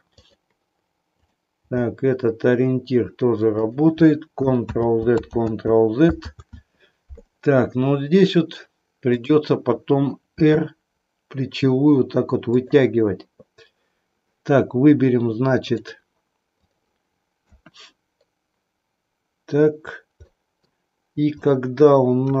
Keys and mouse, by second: 0.2 click, 1.1 click, 1.6 g, 4.6 ctrl+z, 9.0 click, 10.4 r, 12.6 click, 15.6 click, 16.7 click, 17.4 KP_1, 20.2 middle click.